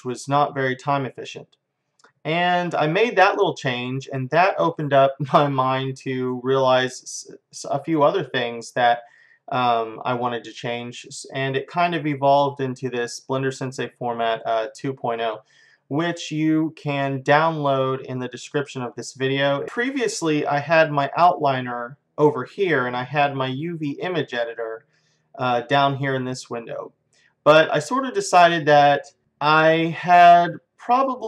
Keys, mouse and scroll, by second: 0.2-1.5 drag, 19.5 click.